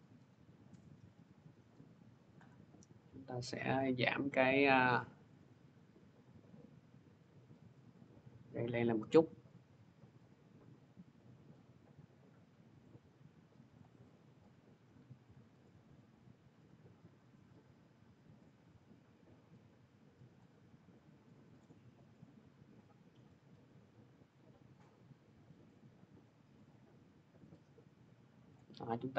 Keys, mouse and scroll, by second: 1.5 click, 7.8 click, 13.6 click, 17.2 scroll, 20.2 click, 21.4 click, 21.5 middle click, 28.3 click.